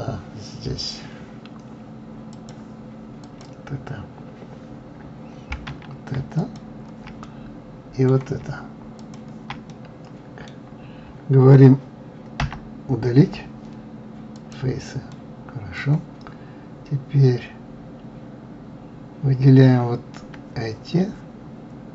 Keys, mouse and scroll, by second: 2.8 click, 3.6 click, 6.8 shift+click, 7.6-9.4 middle drag, 9.4 shift+click, 10.1-12.8 middle drag, 12.8 Delete, 15.5-18.5 middle drag, 20.2-20.8 scroll up 2.